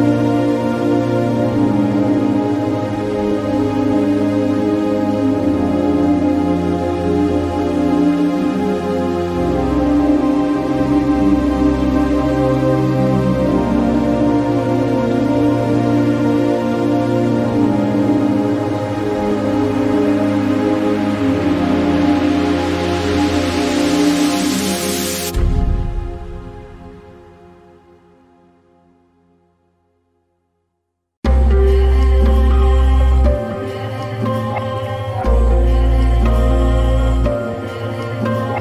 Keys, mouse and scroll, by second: 0.2-12.0 drag, 13.3 click, 20.6 click, 23.2 click, 23.2-30.4 drag, 30.7-38.6 drag.